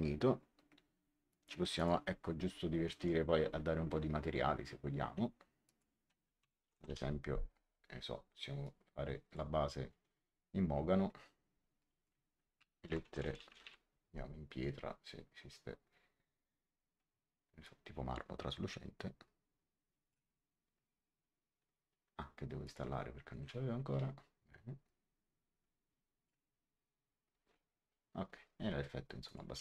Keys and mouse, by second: 1.2 click, 2.9 a, 5.6 click, 6.1-7.0 typing, 8.5 click, 11.7 click, 12.7-14.0 typing, 17.6 click, 22.5 click, 24.8 click, 29.2 click.